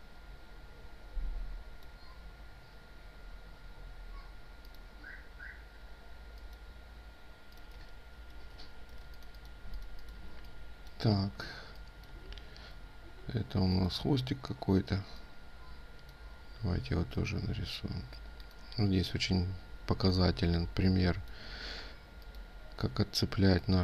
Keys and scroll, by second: 7.6 ctrl+space, 8.4 ctrl+z, 8.7 ctrl+space.